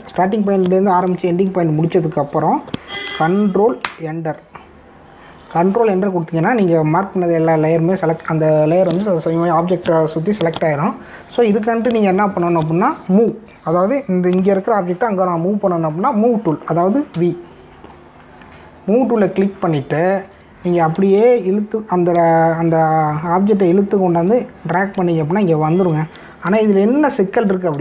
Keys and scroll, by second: 4.8 ctrl+Return, 18.1 v, 27.6 ctrl+=.